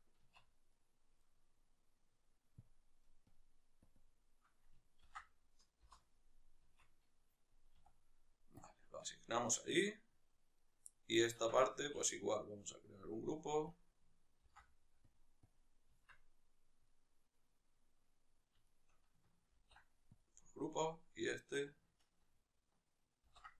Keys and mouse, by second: 0.1 Tab, 0.5-3.1 right drag, 3.1 click, 5.6-9.4 drag, 5.6 Return, 6.5 Tab, 9.2 Tab, 9.4 middle click, 10.3 right click, 10.6-12.7 middle drag, 11.2 Tab, 11.5 a, 12.7 click, 14.8 click, 15.3-16.6 drag, 15.8 Tab, 16.6-18.4 middle drag, 18.4-20.1 shift+right drag, 20.1 ctrl+p, 20.5-23.5 right drag.